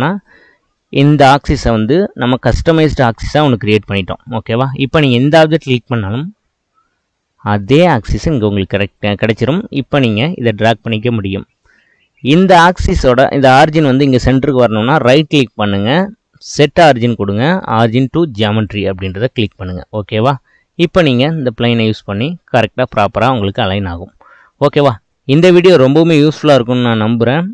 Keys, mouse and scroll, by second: 2.9-4.9 drag, 5.4 click, 6.1-10.2 middle drag, 10.2 click, 15.1-19.4 right drag, 19.4-21.9 middle drag, 21.9 click, 23.8-25.1 middle drag, 25.1-25.5 scroll down 2, 25.5-27.5 middle drag.